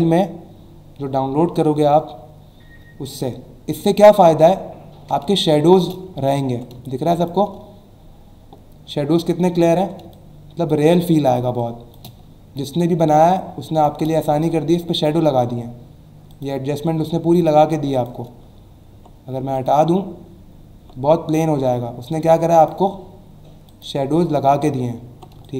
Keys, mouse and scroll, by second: 4.3 alt+scroll up 1, 5.3 space, 5.4 click, 5.8 space, 6.7 space, 6.8 click, 7.3 space, 9.6 alt+scroll up 1, 10.1 click, 10.5 space, 11.6 click, 11.7 space, 12.2-12.8 alt+scroll down 2, 13.3 click, 13.8 space, 16.3 click, 17.9 click, 18.6 alt+scroll down 1, 19.5 click, 20.5 alt+scroll down 1, 22.5 click, 23.7 click, 24.3 alt+scroll up 1, 25.3 space, 25.4 click.